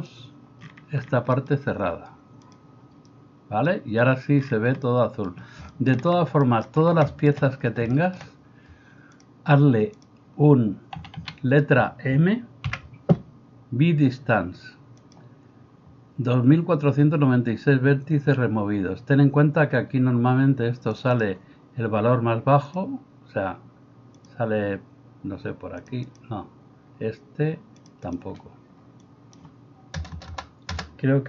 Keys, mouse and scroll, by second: 11.0 a, 11.3 a, 12.7 m, 30.2 BackSpace, 30.7 BackSpace.